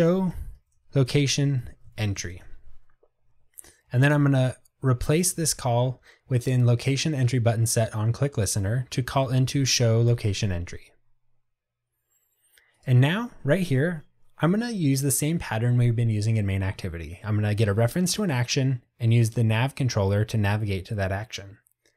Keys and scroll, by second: 2.4 ctrl+shift+super+Return, 10.2 Return.